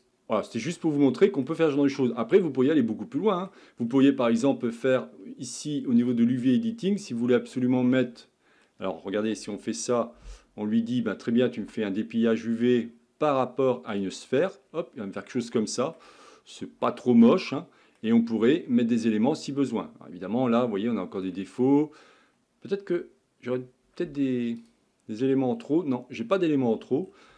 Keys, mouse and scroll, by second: 0.5-0.8 scroll down 2, 0.8-1.7 middle drag, 1.7-2.2 scroll up 4, 2.2-3.8 middle drag, 3.8-4.3 scroll down 2, 4.3-6.2 shift+middle drag, 6.2 drag, 7.4-8.1 scroll up 9, 8.2-9.4 middle drag, 9.4 a, 9.5 a, 14.0 u, 27.0-27.3 scroll down 3.